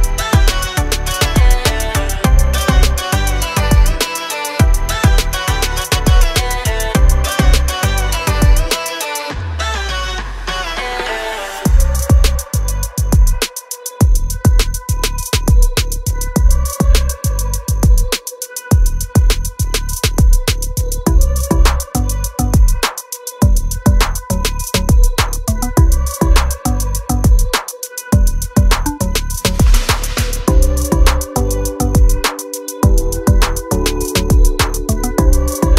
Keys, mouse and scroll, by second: 2.0 e, 3.9 space, 4.4 shift+g, 4.8 u, 9.3-10.1 scroll down 1, 11.4 ctrl+z, 12.1 ctrl+z, 14.6 click, 14.9 double click, 16.3-16.8 scroll up 1, 16.9 ctrl+click, 18.8 scroll down 1, 19.2 click, 21.6 F8, 24.6 ctrl+z, 26.3 click, 26.9-27.3 scroll down 1, 27.7-28.2 scroll up 1, 28.2 click, 32.3 F8, 33.2 v.